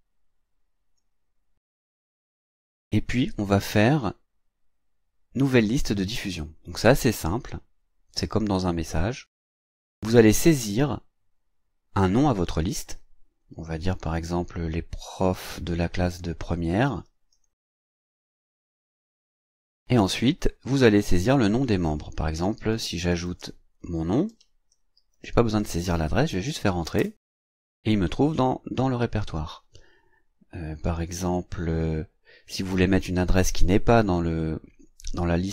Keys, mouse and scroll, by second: 6.5 click, 9.0-10.3 drag, 12.0 click, 16.6-19.9 typing, 20.7 click, 22.0-25.7 typing, 27.0 Return.